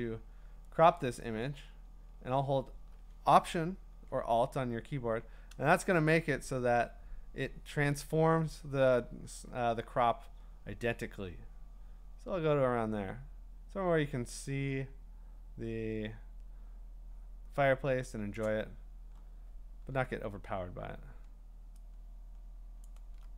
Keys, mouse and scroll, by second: 18.3 alt+click, 22.8 alt+click.